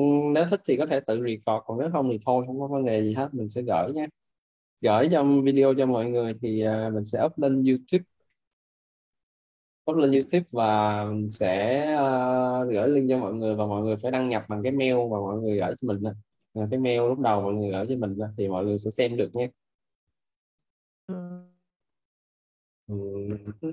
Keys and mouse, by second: 15.6 click, 19.2 click.